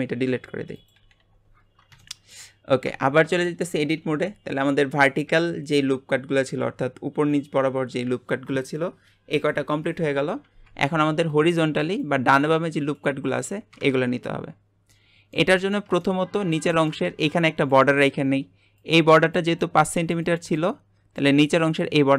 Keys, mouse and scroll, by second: 0.7 click, 0.9 Delete, 1.2 Delete, 1.6-2.0 scroll down 1, 2.0 shift+middle click, 2.8 Tab, 3.4 shift+middle click, 4.0 alt+a, 14.9-22.1 middle drag.